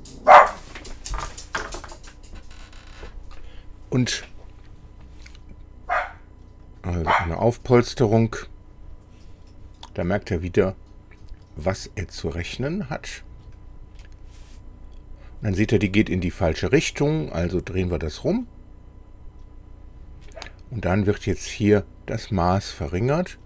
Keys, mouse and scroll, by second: 6.7 click, 12.9-13.3 scroll down 2, 13.6 scroll down 2, 14.0-16.1 middle drag, 17.9 click, 20.3 middle click, 22.4 click, 23.0 click.